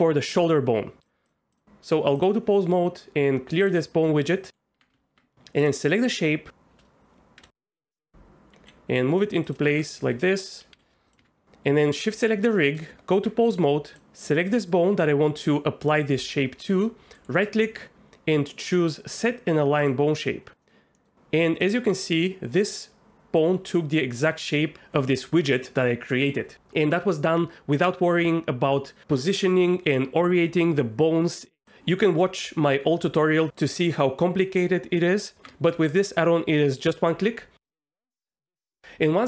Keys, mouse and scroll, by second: 1.6 Tab, 2.1 click, 3.6 click, 4.5 Tab, 4.9 Tab, 7.4 KP_Enter, 7.5 KP_3, 7.8 KP_1, 8.5 g, 9.6 Tab, 10.0 a, 10.7 s, 11.1 click, 11.2 Tab, 12.1 shift+click, 12.8 Tab, 17.3 click, 17.4-19.9 right drag, 20.6 middle click, 21.0 middle drag, 21.6 click, 21.8 r, 38.4 Tab.